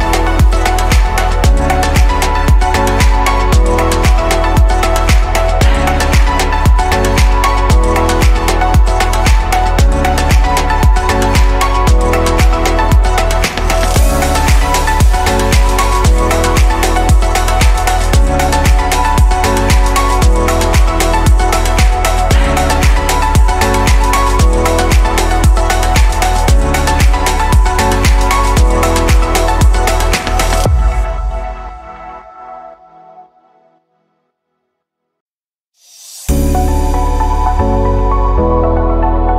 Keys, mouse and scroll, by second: 1.5 shift+d, 3.6 p, 5.3-5.7 drag, 6.9-8.4 middle drag, 8.4 click, 9.8-10.1 scroll down 2, 13.8-14.4 scroll up 2, 14.4-15.9 shift+middle drag, 15.9-18.7 scroll down 2, 28.2 ctrl+z, 31.8 q, 35.4-38.2 drag.